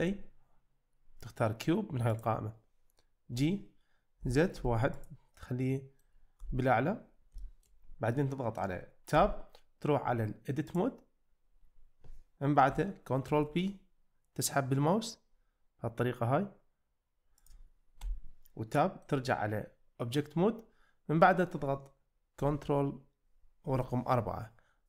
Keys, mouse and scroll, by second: 0.0 shift+a, 3.6 g, 4.2 z, 4.6 1, 5.0 click, 5.4-6.0 middle drag, 6.4 `, 7.4 shift+middle click, 8.2-8.5 middle drag, 9.2 Tab, 10.9-11.5 drag, 13.3 ctrl+b, 17.4 click, 18.0 Tab, 18.8 middle click, 23.7 ctrl+4.